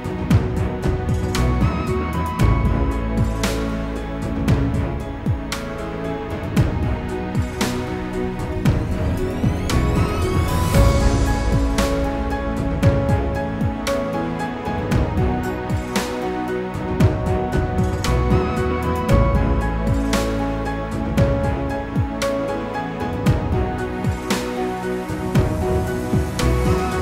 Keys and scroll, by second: 21.3 ctrl+z.